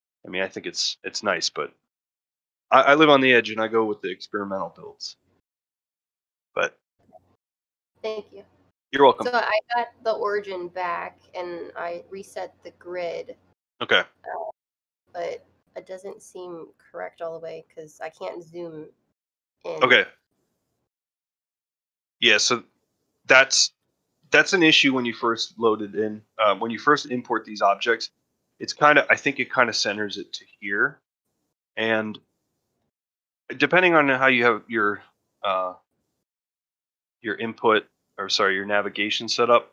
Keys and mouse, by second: 0.4 shift+middle drag, 0.7 middle drag, 1.1 shift+middle drag, 1.4 middle drag, 1.7 shift+middle drag, 2.0-2.4 middle drag, 3.4-3.7 shift+middle drag, 7.8 middle click, 8.2 shift+middle drag, 27.9-28.3 shift+middle drag, 28.5-29.2 ctrl+middle drag, 29.4 shift+middle drag, 31.7-32.0 middle drag, 32.4 shift+middle drag, 32.8-33.1 middle drag, 33.3 shift+middle drag.